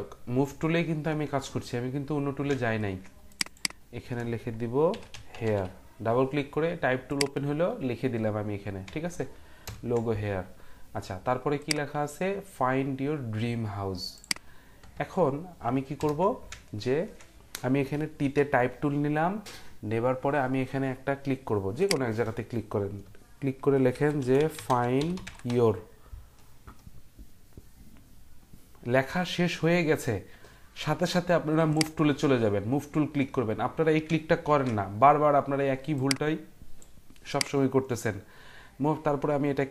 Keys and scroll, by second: 4.7-6.0 typing, 9.6 ctrl+0, 16.0 ctrl+0, 18.2 t, 23.7-26.0 typing, 34.4 ctrl+t.